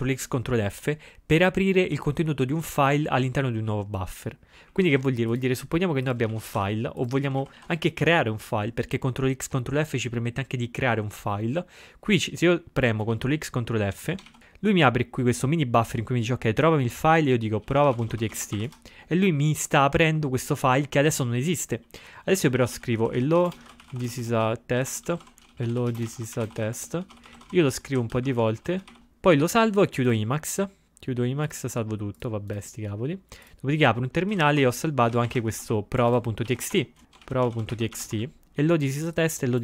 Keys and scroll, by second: 6.4 ctrl+x, 6.7 1, 7.5 ctrl+x, 13.2 ctrl+g, 14.4 ctrl+x, 17.4-19.2 typing, 22.8-25.9 typing, 27.1-29.2 typing, 28.0 alt+shift+b, 28.4 alt+d, 34.4 typing, 36.0-38.7 typing.